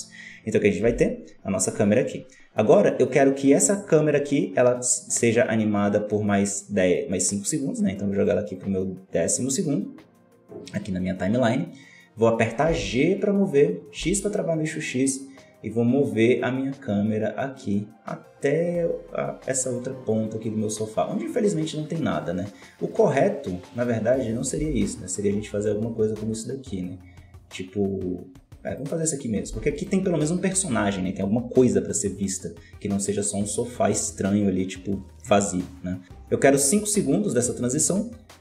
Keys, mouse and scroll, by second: 0.8 Right, 4.8-7.8 drag, 8.5-11.5 drag, 12.6 g, 24.5 g, 29.4 g, 38.3 i.